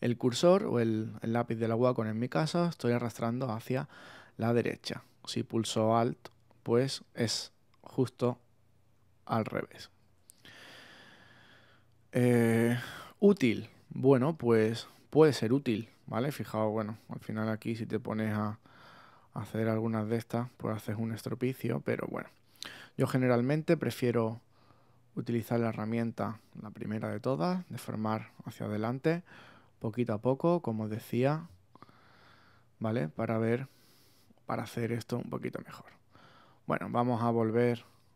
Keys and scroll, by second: 2.8 super+z, 7.4 alt+super+z, 8.2 super+z, 10.1 alt+super+z, 10.9 super+z.